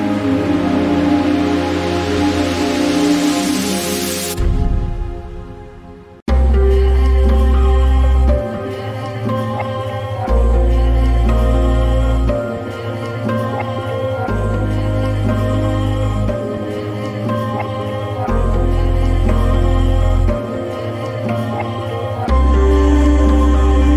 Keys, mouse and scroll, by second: 3.1 click, 5.1-18.3 drag.